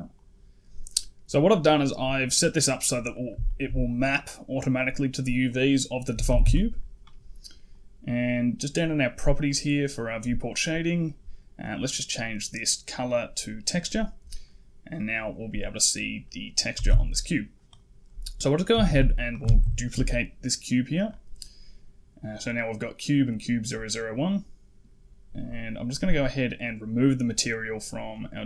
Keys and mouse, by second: 1.6 click, 3.4 shift+middle click, 4.0 click, 6.0 a, 6.1 a, 6.3 a, 7.6-8.6 drag, 9.3-13.7 drag, 14.3 right click, 14.8 middle drag, 16.1 middle click, 16.6 a, 16.7 a, 17.5 click, 18.7 shift+d, 20.3 middle click, 25.7 click.